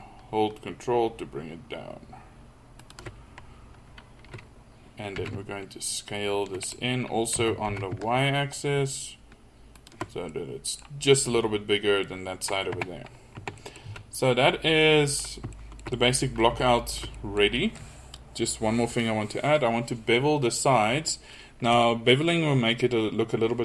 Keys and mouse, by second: 5.2 s, 7.4 s, 12.8 Tab, 13.4 Tab, 13.9 z.